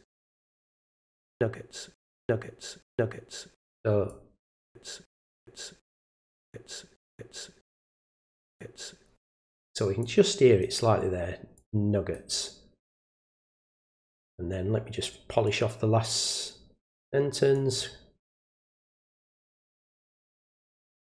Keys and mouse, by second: 0.8 click, 4.1 click, 6.1 drag, 8.1 click, 10.0 click, 11.6 click, 15.4-17.5 drag, 18.5 click, 18.7 click, 19.3 click, 19.7 click, 20.3 click, 20.5 click, 20.9 click.